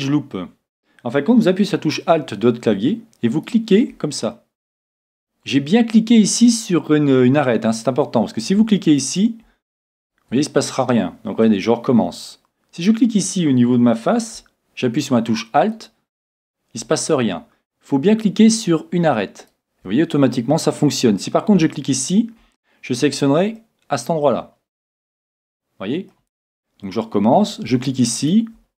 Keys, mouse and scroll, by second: 3.3-5.2 right drag, 4.4-6.1 middle drag, 8.9-11.6 right drag, 11.7 right click, 15.7-17.6 right drag, 19.4-21.2 right drag, 22.0-23.8 right drag, 23.6-25.3 middle drag, 25.4 middle click, 28.2 right click.